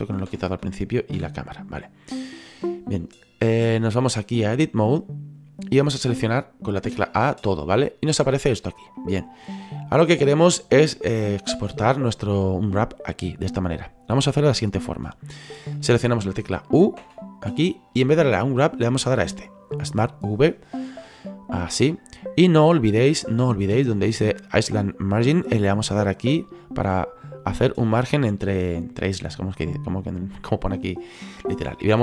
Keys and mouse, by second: 2.1 right click, 4.0 click, 6.8 a, 7.7 middle click, 8.9 middle click, 17.0 u, 21.2 click, 26.3 click.